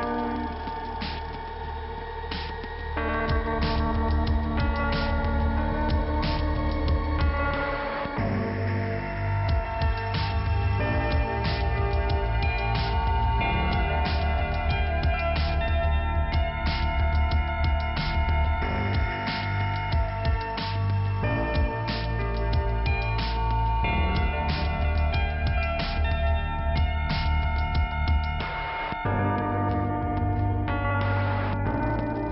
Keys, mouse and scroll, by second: 0.7 click, 1.5 click, 3.4 click, 3.4 click, 3.6 double click, 4.4 double click, 9.2 middle click, 11.9 click, 13.9 click, 15.6 click, 18.0 click, 18.4 click, 18.5 double click, 19.6 double click, 20.9 click, 21.0 click, 22.4 click, 25.8 click, 27.4 click, 30.7 click, 31.8 click.